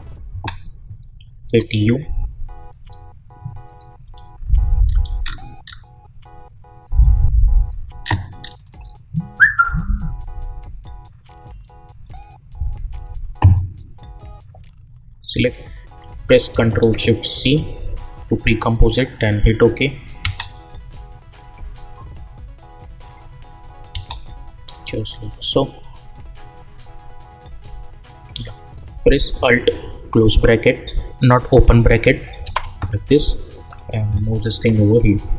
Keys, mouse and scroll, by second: 1.4 u, 2.7 click, 4.0 u, 4.8 scroll up 1, 6.8 click, 8.0 scroll down 1, 10.1-17.3 drag, 17.3 ctrl+shift+c, 19.1 click, 20.2 space, 23.9 space, 24.7-32.4 drag, 32.4 alt+[, 33.6 click, 34.4 [.